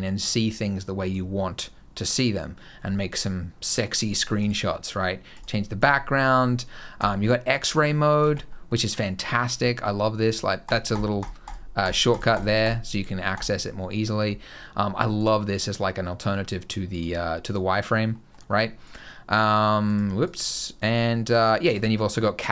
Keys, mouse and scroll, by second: 0.9 click, 7.6 middle click, 8.1 alt+a, 8.3 middle click, 8.6 scroll up 2, 8.8 middle click, 9.3 scroll down 1, 10.5 click, 10.8 click, 11.0 click, 11.3 click, 11.7 click, 12.0 click, 12.2 click, 12.5 click, 13.2 click, 15.0 click, 15.4 click, 16.8 click, 17.3 click, 18.0 middle click, 18.8 click, 19.7 click, 20.1 click.